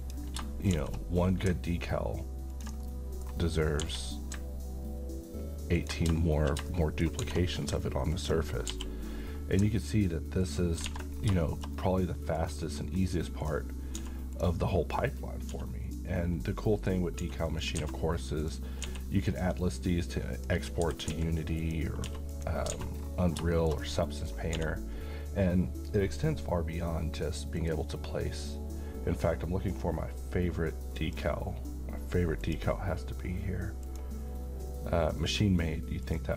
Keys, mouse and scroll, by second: 0.0 click, 0.8 shift+d, 2.5 ctrl+click, 2.8-3.4 middle click, 3.8 g, 5.8 ctrl+click, 6.7-7.3 shift+middle click, 7.2 shift+d, 8.1 click, 8.7 g, 10.4 ctrl+click, 10.8-11.3 scroll down 2, 10.9 alt+a, 11.4-12.4 middle click, 12.4-12.8 scroll up 1, 13.4 click, 14.0 s, 14.3 click, 15.5 s, 15.9 click, 17.2 s, 17.5 click, 17.8 a, 18.4 click, 18.8 s, 19.3 click, 20.8-22.1 typing, 21.6 click, 22.3 click, 22.7 alt+a, 22.9-23.4 scroll down 1, 23.6 shift+middle click, 23.8 shift+scroll down 2, 24.1 middle click, 24.2 scroll up 1, 24.5 d, 27.6 click, 30.9 click.